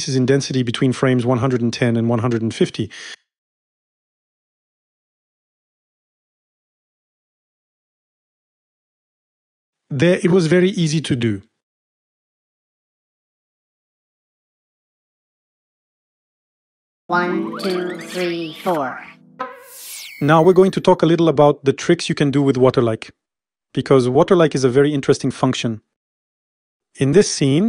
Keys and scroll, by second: 3.6 u, 7.9 Home, 19.3 0, 24.2 0.